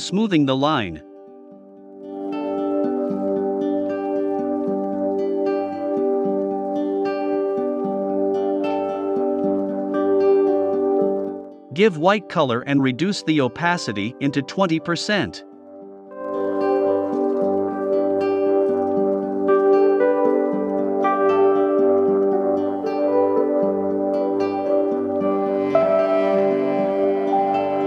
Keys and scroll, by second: 11.2-12.0 typing, 20.5 a, 22.5 super+j, 24.5 v, 25.3 i, 27.4 v.